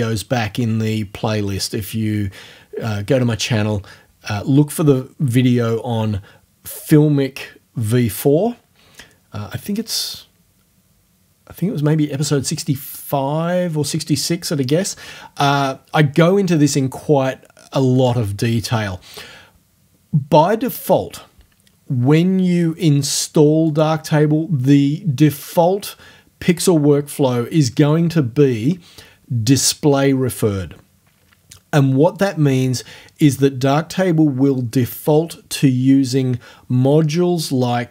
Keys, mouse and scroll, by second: 23.7 click, 32.2 click.